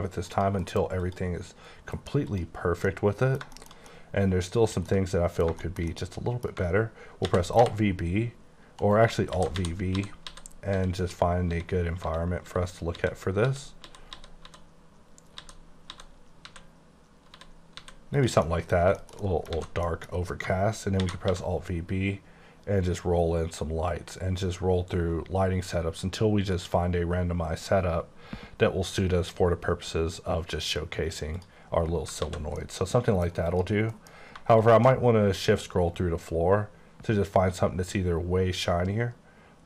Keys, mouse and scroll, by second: 0.4 click, 0.7 alt+m, 1.1 click, 1.9 alt+m, 2.3 click, 2.9 middle click, 4.2 middle click, 5.1 double middle click, 5.6 shift+double middle click, 6.3 double middle click, 7.3 alt+v, 7.6 b, 8.9 right click, 9.4 alt+v, 9.8-17.4 typing, 18.2 click, 18.5 middle click, 19.4 middle click, 19.6 alt+a, 19.9 middle click, 20.1 scroll down 2, 21.1 alt+v, 21.3 b, 22.0-22.7 scroll up 3, 23.2 scroll up 1, 23.8-25.6 scroll up 6, 26.4-27.6 scroll up 5, 28.1-28.8 scroll up 3, 29.2-30.2 scroll up 2, 30.2-30.6 scroll up 2, 31.3 click, 32.2 alt+a, 32.5 middle click, 33.5 click, 34.0 alt+m, 34.6 shift+click, 35.0-37.7 scroll up 11, 37.8 scroll up 1, 38.6 scroll up 1, 39.2-39.6 scroll up 1.